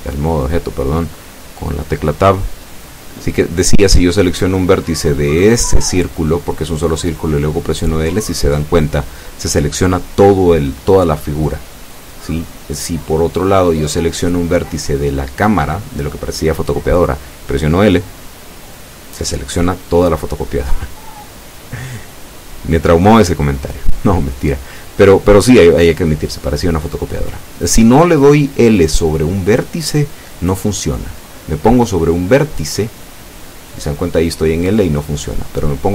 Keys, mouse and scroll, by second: 3.7 Tab, 5.2 scroll down 2, 5.6 scroll up 2, 6.6 Tab, 12.1 right click, 15.5 l, 24.7 right click, 26.2 l, 26.9 scroll down 1, 27.7-31.4 middle drag, 31.7 scroll up 1, 32.5-33.6 middle drag, 34.4 right click, 34.8-35.3 scroll up 4.